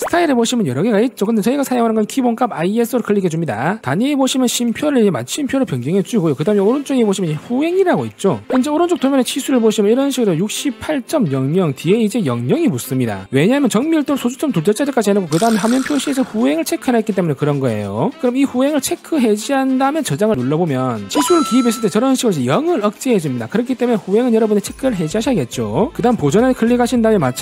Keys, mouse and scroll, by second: 3.6 click, 4.8 click, 6.2 click, 19.2 click, 20.0 click, 21.1 click, 27.0 click.